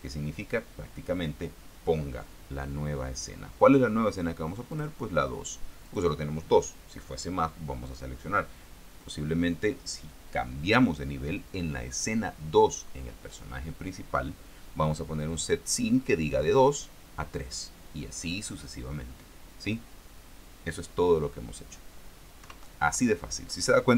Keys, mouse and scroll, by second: 5.0 click, 6.2 click, 22.7 KP_0.